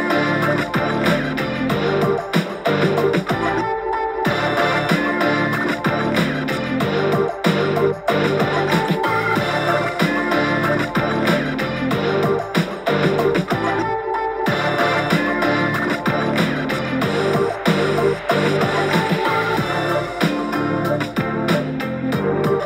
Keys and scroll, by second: 4.8 super+z, 5.4 super+z, 8.1 super+z, 8.3 super+z, 9.2 BackSpace.